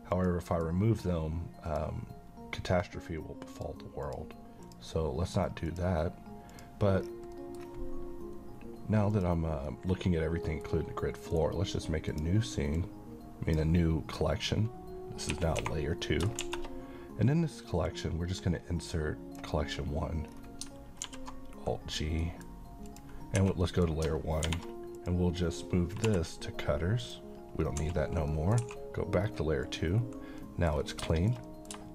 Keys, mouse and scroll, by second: 0.1 click, 7.0-7.3 scroll down 1, 7.3 middle click, 7.5-9.1 scroll up 1, 9.1 click, 9.7-10.9 middle click, 10.7 scroll up 1, 11.3 right click, 12.1-13.7 drag, 15.3-16.4 typing, 16.0 middle click, 17.9-19.4 drag, 20.3 scroll down 1, 21.0 alt+g, 22.2 middle click, 22.9 click, 23.4 1, 23.6 middle click, 24.5 h, 24.9 click, 26.0 m, 27.0 click, 27.6 scroll up 1, 27.8 1, 28.3 middle click, 28.6 2, 29.2-29.6 scroll down 1, 29.6 click, 30.4 middle click, 30.7-31.0 scroll down 1, 31.1 middle click.